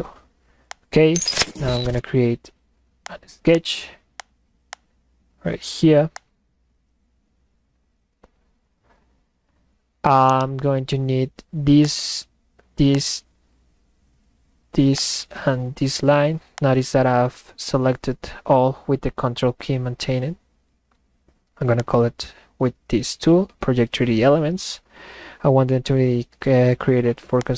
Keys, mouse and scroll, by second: 0.7 click, 3.6 click, 4.7 click, 6.2 click, 9.3 middle click, 10.2 middle click, 10.7 middle click, 11.9 ctrl+click, 12.9 ctrl+click, 16.6 ctrl+click, 21.8 click, 27.4 click.